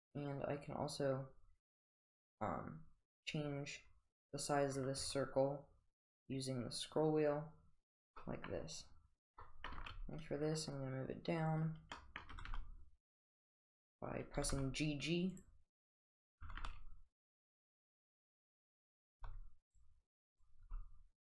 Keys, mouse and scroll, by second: 8.1 g, 8.2 middle drag, 9.5-11.6 middle drag, 9.7 g, 11.6 middle click, 12.0 middle drag, 12.4 g, 14.4 g, 16.1 click, 16.4 g, 18.5 click, 19.1 g, 20.3 click, 20.7 g.